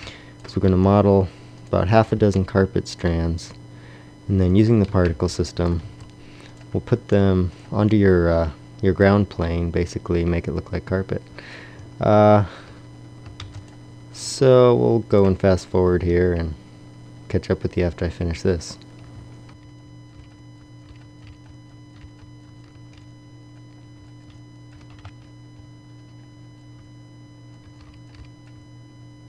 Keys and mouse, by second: 0.5 b, 1.6 click, 3.5 middle click, 4.5 click, 4.7 a, 5.7 g, 6.3 click, 6.7 r, 11.6 Tab, 12.5 z, 13.2 shift+d, 14.0-14.8 drag, 15.7 Tab, 19.0-22.9 typing, 20.2 click, 22.7 Tab, 23.9 x, 24.2 shift+d, 24.7 r, 25.2 Tab, 25.5 g, 26.5 click, 26.7-29.2 typing, 27.4 click.